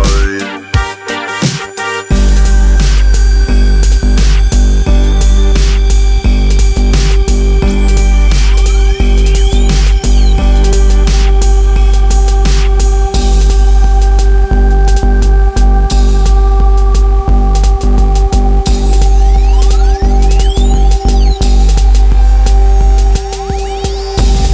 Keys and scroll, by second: 6.7 ctrl+r, 7.0 Escape, 9.8 ctrl+e, 11.2 ctrl+e, 18.2 alt+z, 21.9 alt+z.